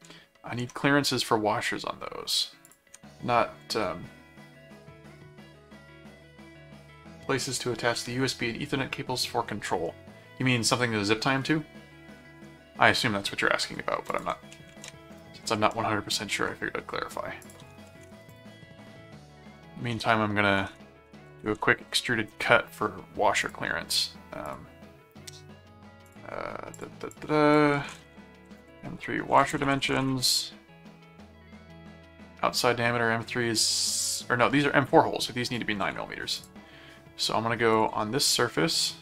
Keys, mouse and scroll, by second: 0.6 ctrl+Tab, 2.7 ctrl+click, 14.1 ctrl+click, 14.5 ctrl+5, 15.6 ctrl+Tab, 16.2 ctrl+Tab, 17.4 ctrl+click, 17.8 ctrl+5, 18.3 click, 18.4-22.0 typing, 22.3 Return, 23.4 click, 24.4 click, 26.0 click, 26.7 click, 27.8 alt+d, 28.2-30.5 typing, 35.4 ctrl+click, 35.8 ctrl+w, 36.4 click, 37.7 click.